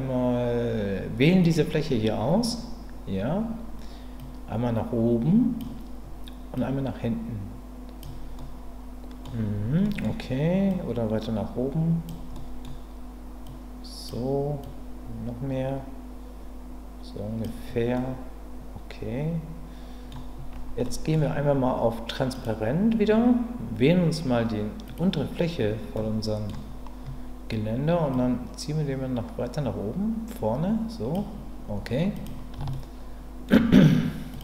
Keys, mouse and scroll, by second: 4.2-5.6 drag, 6.6-8.0 drag, 8.4 middle click, 9.8 middle click, 10.7-12.0 drag, 12.3 middle click, 13.5 click, 14.7 click, 17.9-20.1 middle drag, 20.9 middle click, 22.4 click, 24.9 click, 25.9 middle click, 28.1-31.1 drag, 32.1 click, 32.7 shift+middle click, 34.3 click.